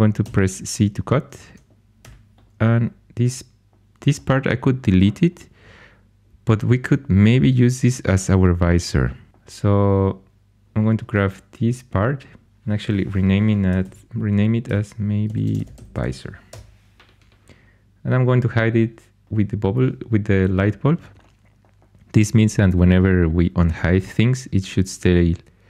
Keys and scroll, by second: 0.2 c, 1.9 4, 13.4-16.5 typing.